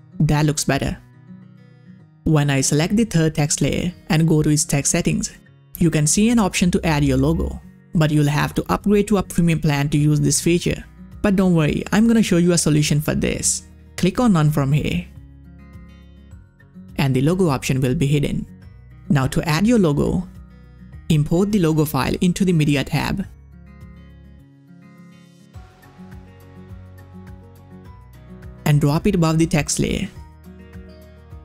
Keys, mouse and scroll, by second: 1.4 click, 4.5 click, 4.6 scroll down 1, 10.2 click, 17.9 click, 19.4 click, 19.4-24.7 drag, 26.1-31.4 drag.